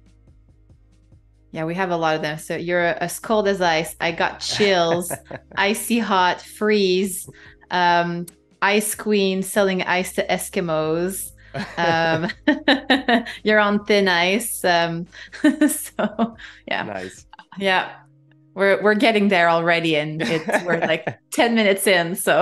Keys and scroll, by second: 0.4 super+g, 2.9 super+g, 4.8 super+g, 8.9 shift+super+[, 9.6 shift+super+[, 10.6 space, 12.5 a, 13.6 BackSpace, 14.4 super+z, 14.8-17.2 typing, 21.5 space.